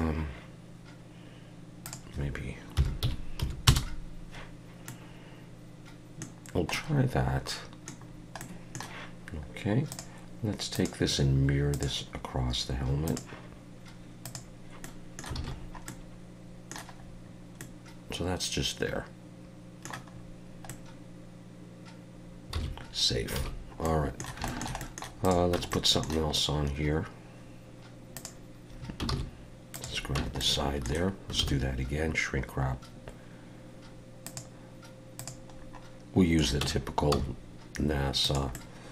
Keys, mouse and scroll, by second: 1.8 click, 4.9 middle click, 6.5 scroll down 1, 6.7 middle click, 8.0 scroll down 2, 8.4 middle click, 9.9 click, 10.7 click, 13.0 click, 14.8 middle click, 15.4 alt+a, 15.6-15.9 scroll down 3, 15.9 middle click, 17.0 scroll up 3, 17.6 middle click, 20.1 scroll up 3, 20.7 middle click, 22.6 ctrl+s, 23.4 alt+a, 23.5 scroll down 3, 23.8 middle click, 24.5 shift+middle click, 24.8 middle click, 25.2 click, 25.6 Tab, 25.7 middle click, 28.1 click, 29.1 shift+s, 30.2 Tab, 30.4 middle click, 31.4 shift+a, 35.8 middle click, 36.6 Tab, 37.1 s, 38.5 middle click.